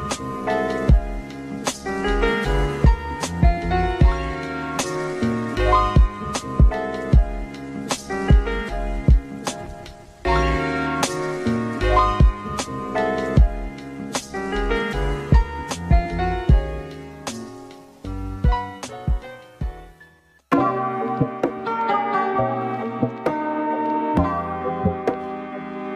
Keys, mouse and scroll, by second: 0.7 click, 1.2 g, 3.2 click, 3.8 e, 4.7 click, 5.1 g, 6.5 click, 6.9 g, 8.0 click, 8.0-15.2 typing, 8.1 click, 8.4 Left, 8.5 Left, 8.8 Left, 9.1 Left, 9.5 click, 9.9 click, 10.2 click, 10.4 click, 10.6 click, 10.9 click, 11.2 click, 11.3 click, 11.5 click, 11.7 click, 12.0 click, 12.2 ctrl+r, 12.6 shift+click, 12.7 ctrl+b, 13.1 click, 13.5 ctrl+r, 13.7 click, 14.4 click, 16.7 click, 17.0 g, 17.9 click, 18.2 g, 20.3 click, 20.5 g, 23.7 Tab, 24.5 click, 25.5 x.